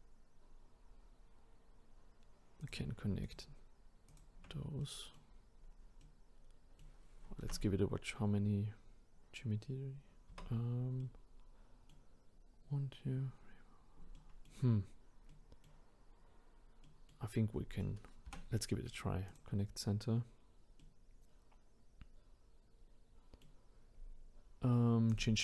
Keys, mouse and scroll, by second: 2.6 click, 3.2 shift+click, 4.1 shift+click, 4.8 middle click, 5.5-6.0 scroll down 1, 6.0-7.4 middle drag, 7.4 Tab, 10.3 Tab, 11.0-14.0 middle drag, 14.1-14.8 middle drag, 14.8-15.3 scroll up 2, 15.3-18.3 middle drag, 18.3 m, 20.8-25.1 middle drag, 25.1 click.